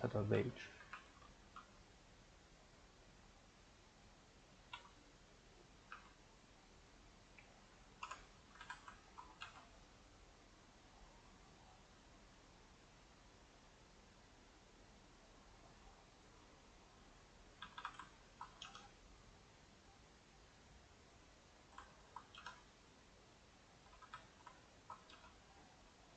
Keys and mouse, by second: 0.9 r, 1.6 g, 7.9 middle click, 8.0 Tab, 8.5 a, 8.6 a, 9.1 ctrl+Right, 9.4 g, 17.6 a, 17.8 a, 18.2 ctrl+Right, 18.7 g, 21.4 Left, 22.0 ctrl+Right, 22.4 g, 23.7 a, 23.9 a, 24.8 ctrl+Right, 25.1 g.